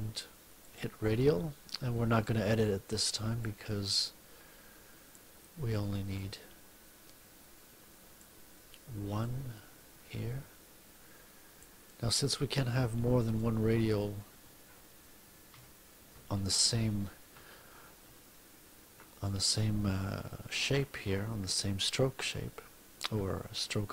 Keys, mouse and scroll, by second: 0.5 click, 3.3-5.3 drag, 6.1-8.3 drag, 9.1-11.7 drag, 15.5 F1.